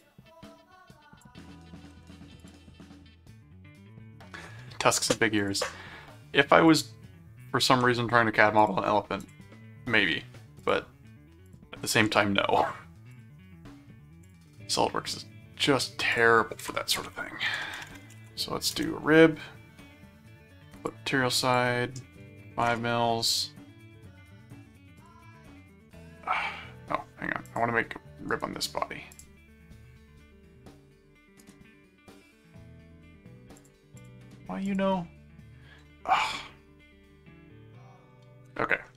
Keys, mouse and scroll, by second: 2.4 click, 5.4 ctrl+click, 6.7 ctrl+click, 8.6 click, 9.2 click, 10.6 ctrl+click, 11.5 ctrl+click, 12.0 alt+d, 13.1 click, 14.2 click, 16.1 click, 16.4-18.5 typing, 18.7 Return, 20.7 click, 21.4 click, 25.0 click, 27.4 click, 28.3 right click, 29.1 click, 31.4 right click, 33.6 click, 34.6 click, 36.3-38.0 middle drag.